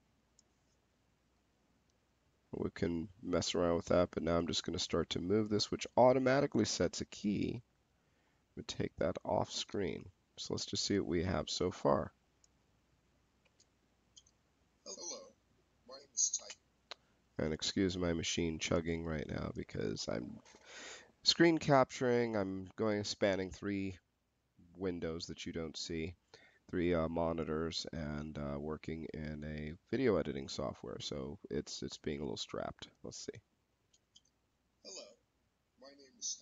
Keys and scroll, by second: 13.3 space, 16.2 space, 33.6 space, 36.2 space.